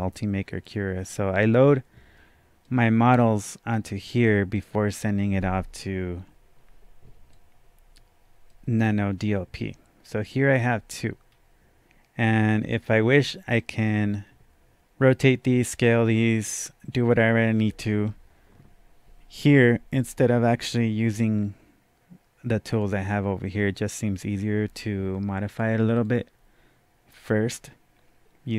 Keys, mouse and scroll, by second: 0.7 click, 2.6-7.3 right drag, 4.9 click, 7.3-11.3 drag, 10.0-10.6 scroll down 1, 10.7-11.1 scroll up 1, 11.3-12.6 scroll down 1, 12.7-18.4 drag, 22.7 click, 25.5 click, 26.0 click.